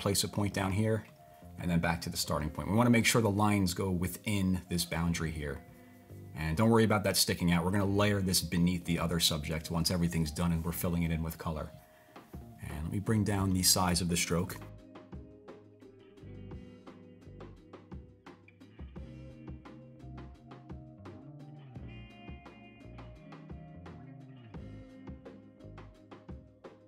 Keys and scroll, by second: 14.0-15.0 typing.